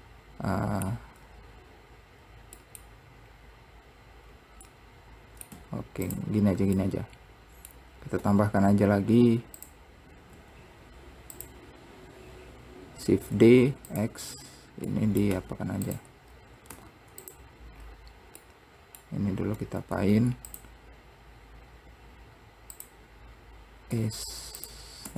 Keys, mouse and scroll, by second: 1.8-2.7 scroll up 1, 2.7 scroll up 1, 2.8 middle click, 3.5-4.5 scroll up 2, 4.5 scroll down 2, 4.8 middle click, 5.7 `, 7.1-8.4 middle drag, 8.4 Tab, 9.8 click, 10.5 `, 12.4 scroll down 1, 13.5 shift+d, 15.1 middle click, 16.4-16.9 scroll up 2, 18.0-18.6 scroll up 1, 18.6-20.2 middle drag, 20.2 Tab, 20.7 click, 22.9 click, 24.1 Tab, 24.8 click.